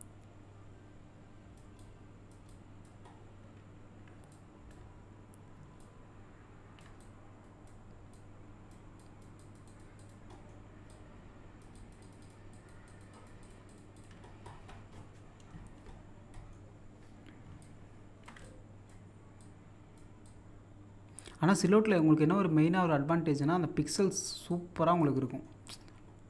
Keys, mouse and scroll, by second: 3.1-3.7 scroll down 1, 4.2 scroll down 1, 4.3-5.8 drag, 5.8 click, 7.0-9.0 drag, 10.3 middle click, 10.9 click, 14.3-14.9 scroll down 1, 16.3 middle click, 17.6 click, 18.5-25.3 ctrl+drag, 25.3 middle click, 25.6-26.2 scroll up 1.